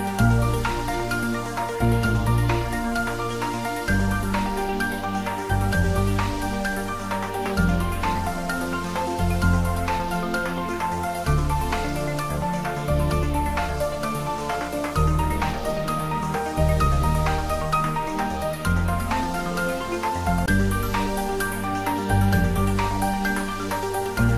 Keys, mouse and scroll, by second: 8.3 click, 9.9 alt+shift+click, 13.5 alt+shift+click, 16.5 alt+shift+click, 22.2 alt+shift+click, 23.1 alt+shift+click.